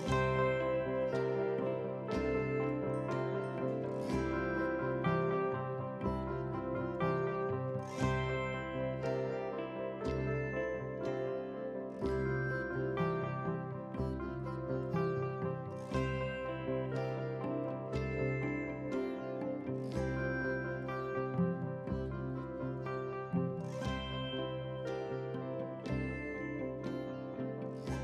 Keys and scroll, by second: 6.4 ctrl+r, 25.5 ctrl+c.